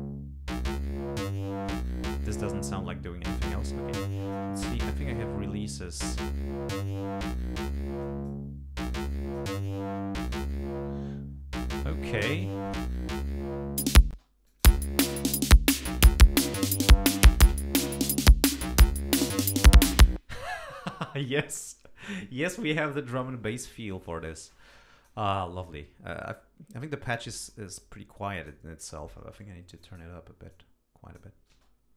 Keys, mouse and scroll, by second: 1.7 click, 4.1 click, 4.9 click, 8.0 click, 9.1 click, 12.7 click, 13.8 click, 14.2 space, 14.5 click, 16.6 right click, 19.9 click, 24.1-25.3 drag, 27.4 click, 27.8 click, 29.8 click, 30.5 click, 31.5 space.